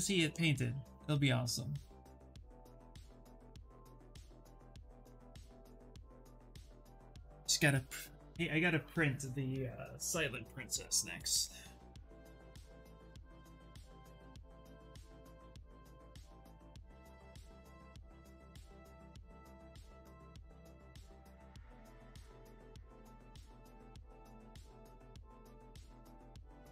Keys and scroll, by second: 22.1 s.